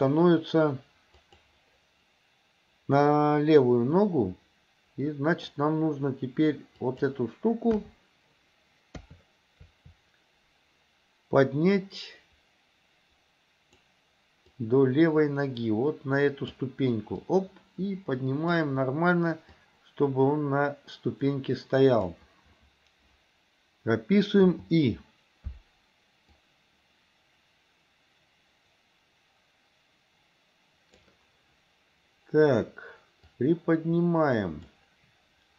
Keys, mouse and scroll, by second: 1.3 click, 4.1-5.5 middle drag, 6.9 click, 7.7 KP_1, 8.9 KP_3, 11.9-13.9 drag, 14.6-16.6 drag, 17.3-18.7 drag, 19.7-22.2 drag, 24.5 i, 26.4-31.1 drag, 33.3-34.8 drag.